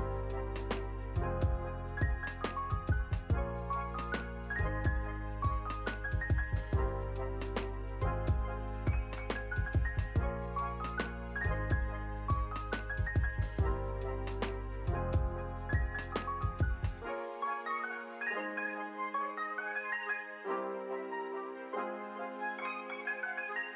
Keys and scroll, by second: 16.0 u, 17.9-19.7 typing, 22.9 8.